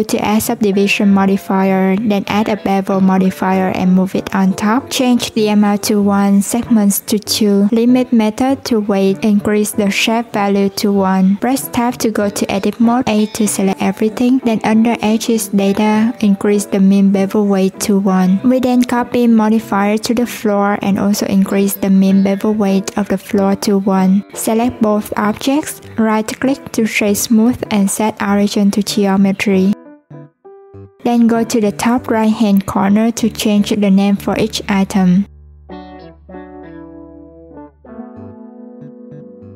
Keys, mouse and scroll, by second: 0.1-3.3 drag, 4.9 click, 6.0 click, 7.3-11.0 drag, 11.6 Tab, 13.9-15.3 drag, 15.3 Tab, 16.0 click, 16.5 shift+click, 17.3 ctrl+l, 20.0 click, 20.4 Tab, 20.9 a, 22.0-23.1 drag, 23.1 Tab, 24.0 shift+click, 24.5-31.0 right drag, 31.0 click, 32.0-33.7 drag, 36.1 click, 36.2 click, 37.6 click, 37.7-39.5 drag.